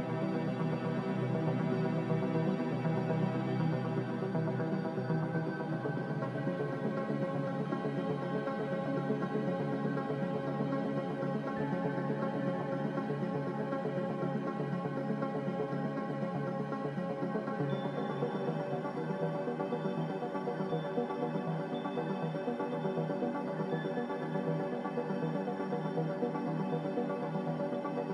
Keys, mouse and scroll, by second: 0.3 g, 1.6-3.3 typing, 4.9-5.6 typing, 6.7-7.7 typing, 9.1-9.9 typing, 13.2 a, 14.9 z, 16.8-17.7 typing, 22.2 ctrl+z, 22.4 ctrl+z.